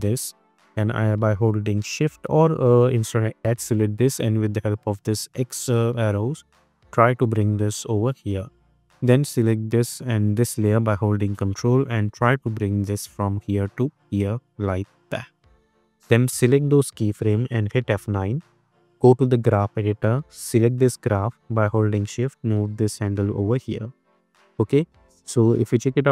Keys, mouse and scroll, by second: 2.6 ctrl+z, 5.6-8.7 drag, 10.4 ctrl+click, 12.1-15.5 drag, 17.7 F9, 19.4-21.0 drag, 22.0-22.9 shift+drag, 23.9-24.2 drag, 25.0 space.